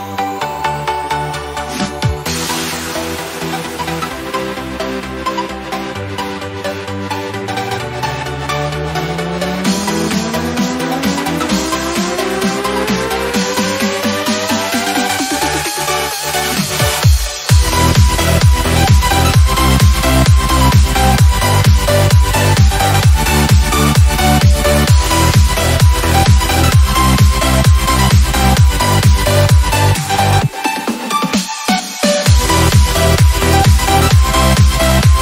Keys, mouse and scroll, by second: 0.9 click, 6.0 Return, 9.6-11.1 drag, 19.1 click, 24.8 Return, 29.6 click.